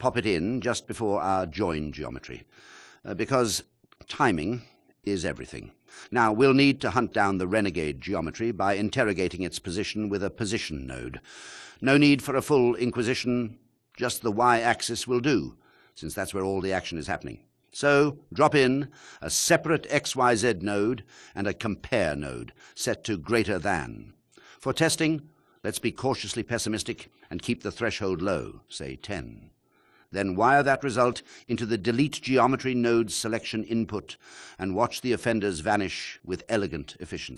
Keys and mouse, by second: 4.5-5.8 drag, 6.7 click, 10.7 shift+a, 20.0-29.0 drag, 30.0-32.2 drag, 35.1 click.